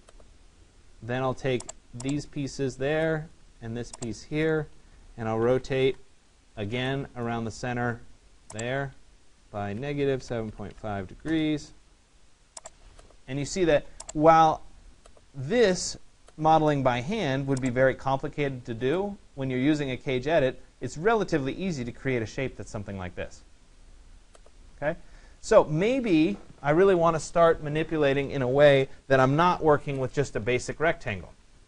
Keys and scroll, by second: 5.5 Return, 11.3 Return.